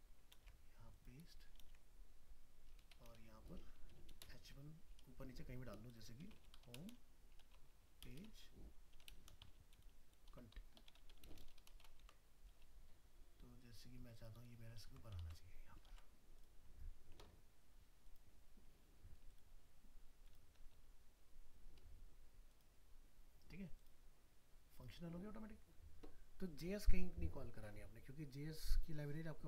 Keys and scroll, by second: 12.0 ctrl+x, 12.5 ctrl+Home, 14.8 ctrl+v.